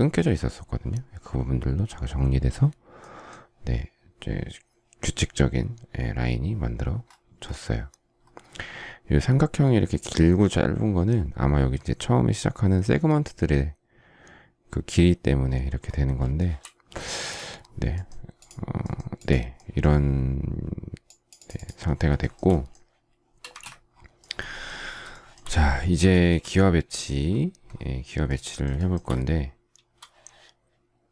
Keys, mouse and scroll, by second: 16.2 shift+middle click, 16.8 space, 17.0 Escape, 22.0 shift+middle click, 23.3 space, 23.3 Escape, 24.9 shift+middle click, 25.9 shift+middle click, 28.6 shift+middle click.